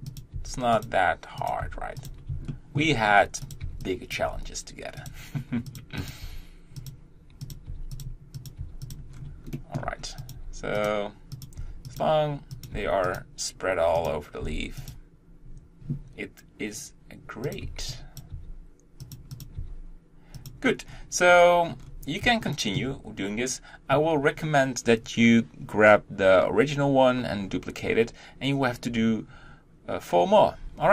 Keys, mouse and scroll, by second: 0.2 click, 0.3 g, 1.5 click, 1.6 g, 2.5 shift+middle click, 3.0 scroll up 1, 3.7 b, 4.3 g, 5.8 click, 6.1 click, 6.2 g, 7.5 click, 7.7 g, 8.5 click, 8.6 g, 9.1 scroll down 2, 9.6 shift+middle click, 10.3 click, 10.4 g, 11.4 click, 11.6 g, 12.6 click, 12.7 g, 14.0 click, 14.4 g, 17.5 click, 17.8 b, 18.4 g, 19.4 click, 19.6 g, 20.9 scroll down 1, 22.5-30.9 shift+middle drag.